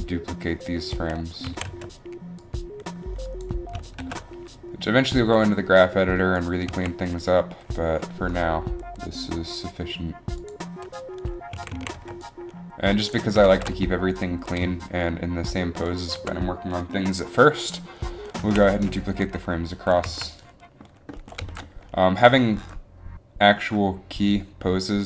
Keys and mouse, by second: 0.7 Delete, 1.8 b, 1.8 a, 4.2 a, 4.2 b, 4.2 shift+d, 6.9 a, 8.1 shift+d, 8.8 a, 9.9 shift+d, 11.7 a, 11.9 a, 12.1 b, 13.6 shift+d, 18.6 a, 20.2 a, 20.2 z.